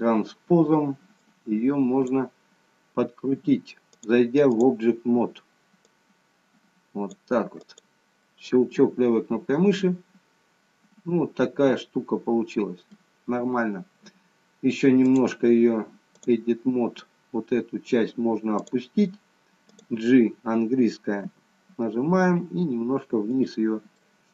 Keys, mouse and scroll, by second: 1.5 click, 3.9 click, 5.8 click, 7.6 click, 8.2 middle click, 15.0 click, 19.9 click, 21.3 g, 24.0 middle click.